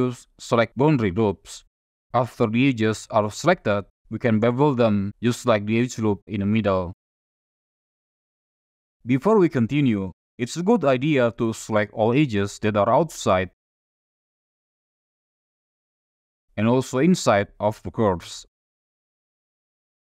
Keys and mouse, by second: 4.5 ctrl+b, 8.4-9.5 drag, 9.9 shift+click, 12.0 click, 13.3 ctrl+click, 14.0 ctrl+click, 14.7 ctrl+click, 15.2 ctrl+click, 15.7 ctrl+click, 16.9 shift+click, 18.0 ctrl+click, 18.6 ctrl+click, 19.2 ctrl+click, 19.6 ctrl+click.